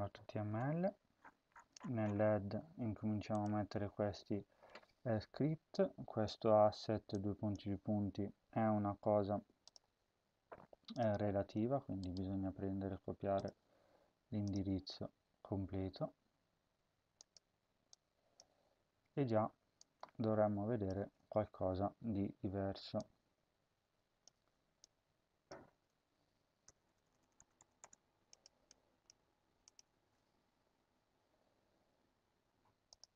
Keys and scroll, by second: 0.0-0.4 typing, 3.5 ctrl+v, 20.9 ctrl+v, 24.2 ctrl+c, 25.5 ctrl+v, 26.5-27.7 typing, 29.8 ctrl+s.